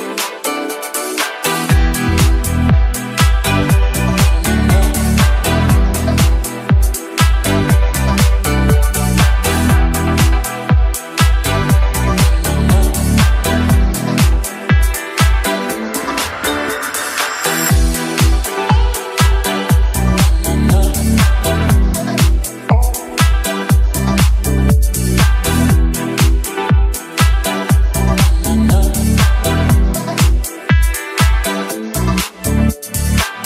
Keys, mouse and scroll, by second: 0.6-1.6 scroll down 2, 4.8-5.2 middle drag, 6.6-7.0 middle drag, 7.5 shift+a, 10.9-11.8 drag, 12.4-14.5 drag, 15.7 g, 16.2 z, 17.9 click, 18.7 click, 28.3 KP_7, 30.2 g, 30.5 y, 31.2 click, 31.8-32.2 middle drag, 32.4 r, 32.8 x.